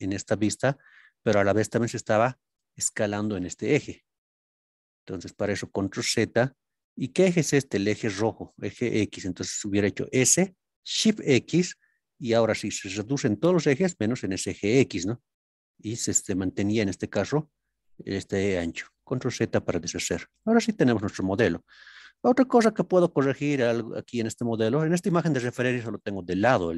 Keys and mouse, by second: 0.6 middle click, 2.4 click, 5.6 ctrl+z, 11.2 shift+x, 16.5 click, 16.9 middle click, 20.3-20.9 middle drag, 22.5-22.9 shift+middle drag, 24.4-25.0 middle drag.